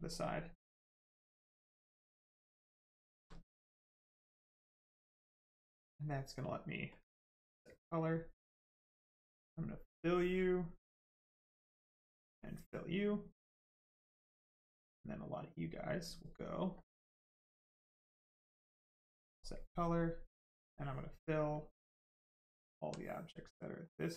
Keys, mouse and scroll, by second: 0.5 click, 2.3 right click, 3.3 alt+right click, 6.9 click, 9.7 click, 10.7 alt+click, 12.0 click, 12.8 right click, 13.9 alt+click, 16.7 click, 18.9 click, 21.5 click, 23.5 click.